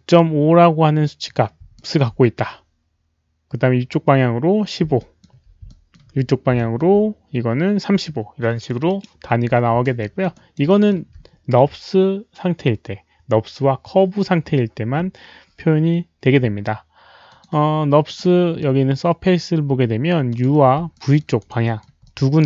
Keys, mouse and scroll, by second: 1.7 alt+middle click, 4.9 alt+middle click, 5.1 alt+click, 5.7 alt+middle click, 6.5 alt+middle click, 9.9 alt+middle click, 10.3 alt+right click, 10.6 alt+middle click, 12.5 alt+middle click, 14.9 alt+middle click, 14.9 alt+right click, 17.2 click, 18.0 click, 20.2 click, 20.4 alt+middle click, 20.4 alt+right click, 20.9 alt+middle click, 21.3 alt+right click, 21.6 alt+middle click, 22.0 alt+click, 22.2 alt+right click.